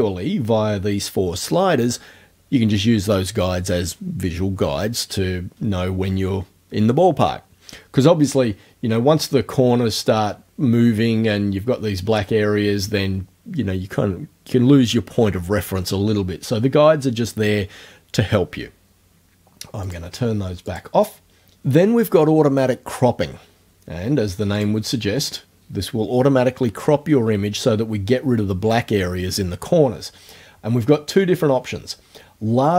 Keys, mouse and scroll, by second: 19.9 click, 20.7 click, 24.6 click.